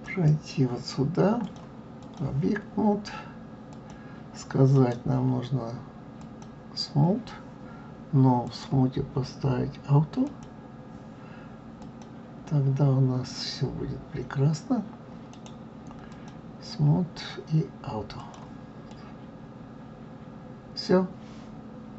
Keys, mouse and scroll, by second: 1.4-3.9 drag, 4.7-7.7 right drag, 8.5 click, 10.3 click, 11.8 click, 15.3 right click, 16.2-18.2 right drag, 18.2 click, 18.9-21.9 middle drag.